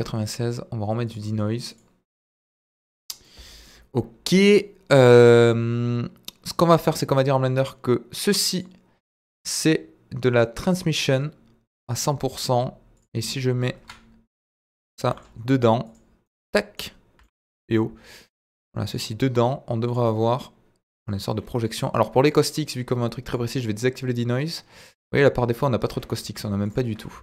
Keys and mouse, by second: 1.0 click, 1.7 click, 2.2-3.0 middle drag, 3.3-3.6 middle drag, 8.5 click, 10.8 click, 13.8 KP_1, 15.0 g, 15.1 middle click, 15.8 click, 16.2-16.8 middle drag, 17.1 g, 17.2 middle click, 18.3 click, 18.6 middle click, 23.2 click, 25.0 z, 26.6 click.